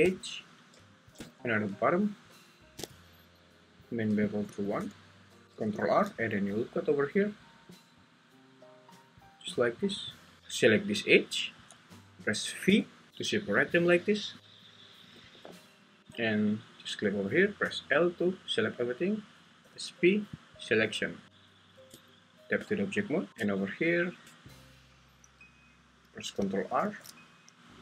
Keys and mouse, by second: 4.4 click, 5.4 ctrl+Tab, 5.8 ctrl+r, 10.0 click, 12.8 v, 15.2 Escape, 16.0 Tab, 17.6 l, 19.6 p, 21.9 Tab, 23.3 `, 23.5 Tab, 26.8 ctrl+r.